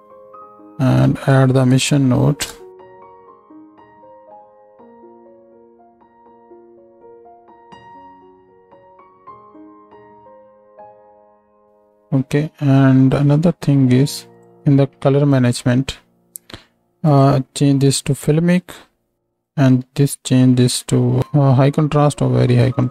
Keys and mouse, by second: 3.5 click, 7.7 click, 14.3-15.5 drag.